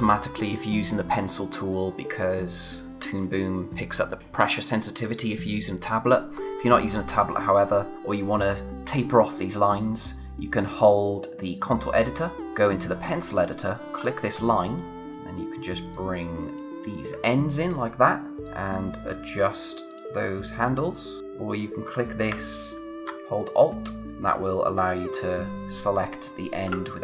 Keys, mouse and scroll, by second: 13.9-14.9 scroll up 1, 14.9 click, 17.1 scroll down 1, 18.5 click, 21.2-21.5 scroll up 1, 21.5 click, 23.5 alt+click.